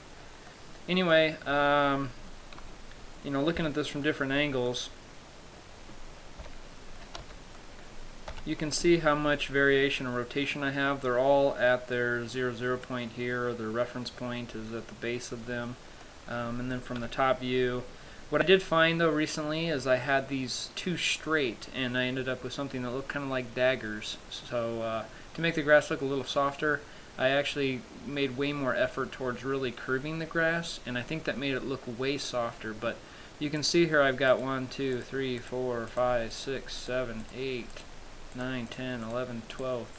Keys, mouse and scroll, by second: 0.8 middle click, 1.4 middle click, 2.9 Tab, 3.8 KP_3, 5.7 middle click, 6.7 KP_5, 7.4 z, 7.8 middle click, 8.6 KP_3, 9.3-9.8 scroll up 3, 16.3 middle click, 17.2 KP_7, 18.7-19.3 scroll down 6, 18.9-19.3 scroll up 2, 33.9 right click, 34.6 right click, 35.2 right click, 35.7 right click, 36.2 right click, 36.7 right click, 37.1 right click, 37.5 right click, 38.1 right click, 38.6 right click, 39.0 right click, 39.3 right click, 39.9 right click.